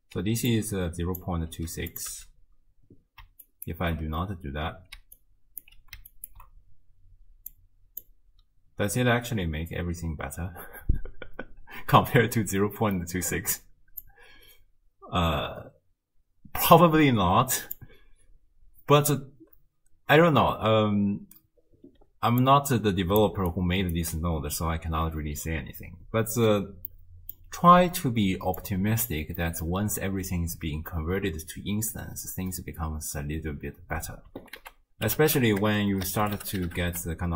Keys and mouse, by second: 0.2-1.4 d, 0.5 click, 1.9 click, 1.9 d, 2.1 m, 3.6 ctrl+alt+click, 5.0 d, 5.2 click, 5.7 d, 6.1 ctrl+click, 7.5 click, 14.0-17.8 drag, 22.0-23.5 d, 22.5 click, 23.5 click, 24.0 d, 24.0 d, 24.3 d, 26.9 click, 28.6 click, 29.4 middle click, 34.6 ctrl+a, 35.8 BackSpace, 35.9 BackSpace.